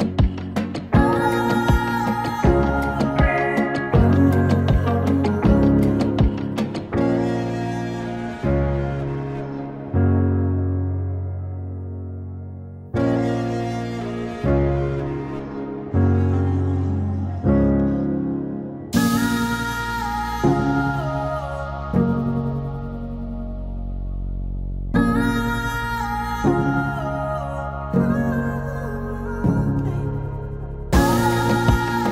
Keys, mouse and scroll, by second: 3.9-8.2 drag, 8.2 right click, 9.7 click, 13.4 ctrl+shift+c, 15.0-16.7 typing, 20.8-27.2 drag, 27.9 space.